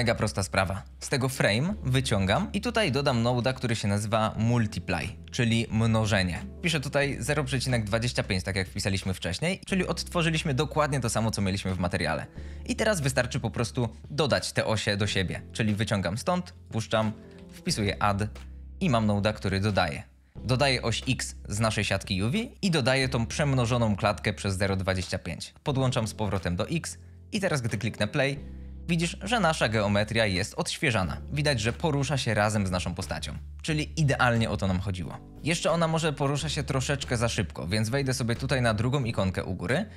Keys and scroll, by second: 2.6 m, 3.0 u, 3.2 t, 3.3 i, 4.1 Return, 6.9 ., 7.4 KP_2, 7.6 KP_5, 7.9 5, 8.0 Return, 17.2 d, 17.7 Return, 28.1 space.